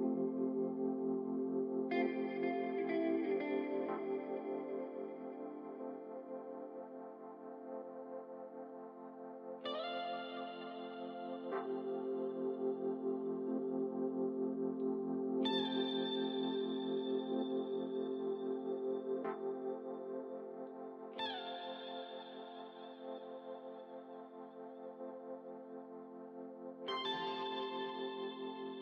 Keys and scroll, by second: 18.1-19.1 typing, 19.6 Return, 25.5-27.0 typing, 27.7 Return.